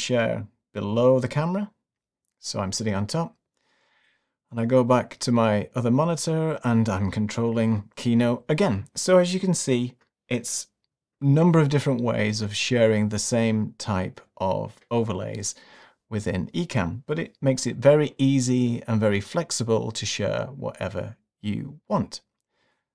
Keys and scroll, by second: 7.1 Right, 9.4 Right, 10.8 Left.